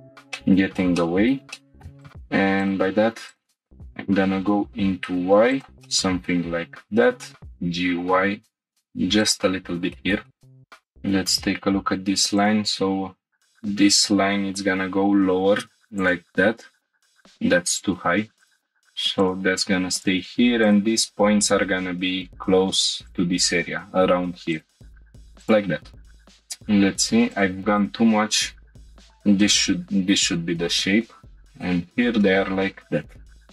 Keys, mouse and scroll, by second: 0.4 shift+middle click, 1.0 middle click, 1.5-1.8 shift+middle drag, 1.8 scroll up 3, 1.8 1, 2.0-2.3 drag, 3.7 y, 5.5 click, 5.8-7.3 middle drag, 7.4 scroll down 2, 7.6 g, 7.6 y, 9.2 click, 9.4 scroll down 1, 9.9 shift+middle drag, 10.2-10.6 middle drag, 10.6 click, 10.6 scroll down 2, 12.4 ctrl+click, 13.5 g, 13.7 z, 16.0 click, 18.4 ctrl+click, 19.2 click, 19.9 click, 20.6 ctrl+click, 21.4 g, 21.5 z, 23.1-24.2 drag, 25.5 click, 26.1 scroll down 1, 27.3 drag, 27.8 shift+click, 28.5 g, 28.7 y, 28.8 middle click, 28.8 click, 29.2 g, 29.5 y, 31.5 middle click, 31.5 ctrl+click, 31.9-32.4 scroll down 2, 32.2 middle click, 33.0-33.5 scroll up 1.